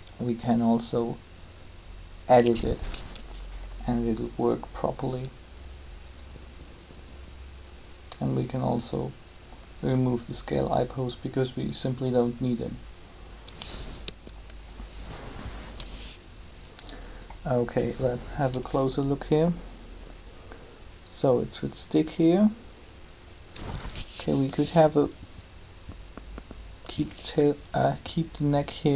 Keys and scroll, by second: 13.8 3, 24.4 r.